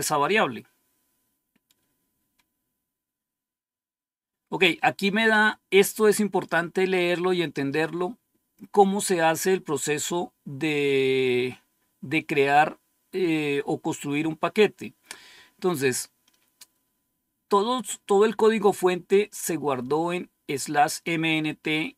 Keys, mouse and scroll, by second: 0.1 scroll down 1, 19.3-20.9 drag, 21.4 click.